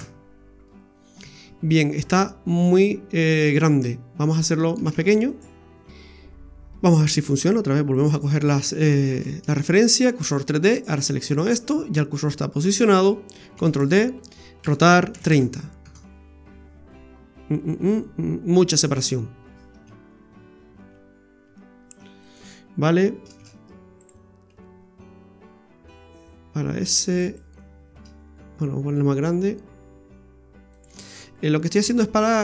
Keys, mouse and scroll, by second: 4.9 ctrl+z, 5.3 right click, 5.9 scroll down 1, 6.6-7.4 scroll down 3, 7.4 right click, 7.8 Tab, 7.9 right click, 9.1 shift+s, 10.7 right click, 13.6 shift+d, 14.6 r, 20.0 ctrl+z, 20.9 ctrl+z, 21.5 ctrl+z, 22.3 right click, 23.4 shift+s, 24.5 s, 28.1 s, 31.8 g.